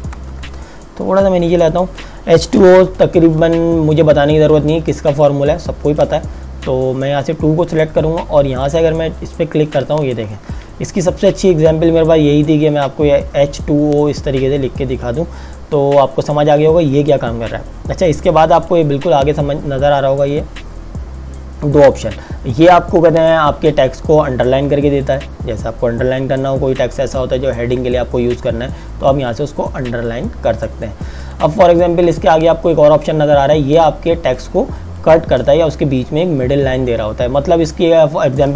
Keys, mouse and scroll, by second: 0.0 Return, 1.2 click, 4.5 t, 5.2 click, 8.7 click, 10.3 KP_Enter, 11.2 click, 18.7 click, 25.0 click, 31.2 click, 34.9 click.